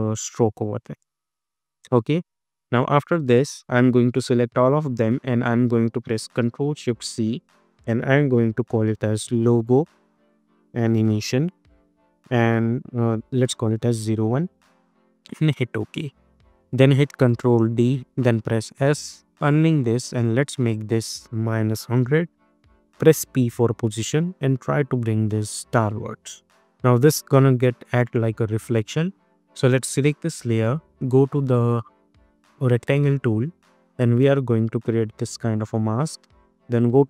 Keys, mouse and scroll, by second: 2.1 space, 3.2-6.8 drag, 6.8 ctrl+shift+c, 8.5-12.0 typing, 13.9 1, 15.4 Return, 17.0 ctrl+d, 18.2 s, 19.3 click, 21.6 -, 21.8 Return, 24.0-28.7 drag, 32.6-37.0 drag.